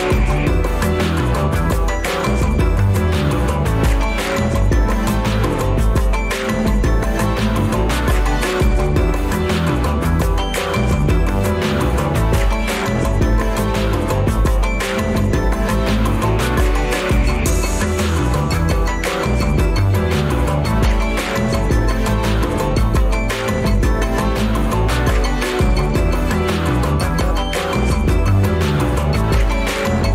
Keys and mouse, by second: 0.4 click, 0.8 g, 8.7 click, 9.3 g, 10.9 click, 18.2-23.5 drag, 27.9 click.